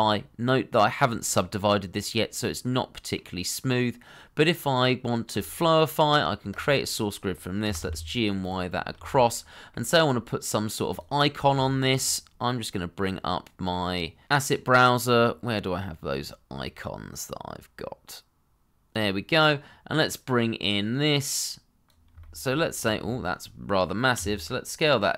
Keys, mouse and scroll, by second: 2.1 middle click, 7.6 g, 8.4 y, 8.8 scroll down 1, 9.0 shift+middle click, 9.3 middle click, 10.8-11.5 scroll up 1, 11.5 shift+middle click, 15.9-16.8 scroll down 1, 22.2 shift+middle click, 22.7-24.1 scroll down 1, 24.1 s.